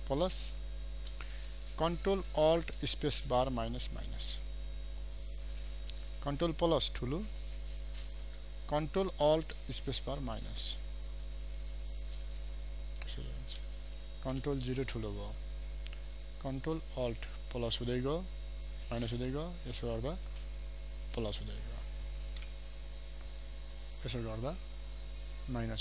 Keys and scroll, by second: 2.8 ctrl+alt+space, 9.7 ctrl+alt+space, 14.4 ctrl+0, 16.2 ctrl+space, 24.2 ctrl+space.